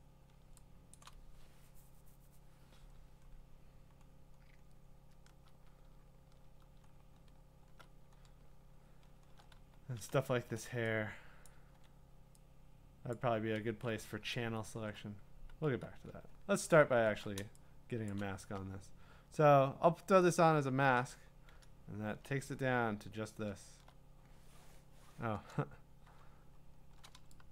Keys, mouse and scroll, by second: 0.2 shift+click, 1.0 click, 3.4-4.0 scroll, 4.0 scroll down 4, 4.7-5.9 scroll down 7, 5.9 scroll down 5, 6.8-7.6 scroll up 7, 7.9-9.6 scroll, 11.5 click, 12.0-12.9 typing, 13.1 click, 13.6 ctrl+z, 14.1-14.6 scroll, 14.8-15.6 scroll down 14, 15.6 q, 15.9-16.8 scroll down 6, 16.8-17.4 scroll, 18.2 click, 20.3-20.9 click, 21.3-23.3 scroll, 26.3-26.9 scroll.